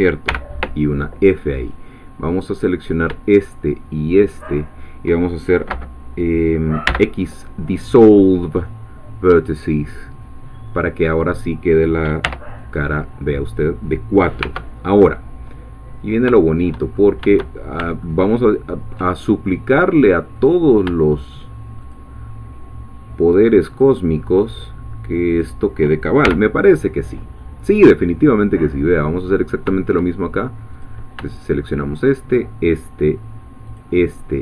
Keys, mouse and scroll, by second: 0.3 f, 2.6 click, 4.3 shift+click, 6.9 x, 9.4-12.2 drag, 12.2 3, 12.6 click, 14.4 1, 16.4 shift+middle click, 16.9 shift+scroll up 2, 17.5 shift+scroll down 2, 18.0-19.1 ctrl+middle drag, 20.3 click, 21.9-24.0 shift+drag, 25.4 shift+click, 26.3 shift+f, 29.2 click, 30.8 click, 31.9 shift+click, 33.8-34.4 shift+drag.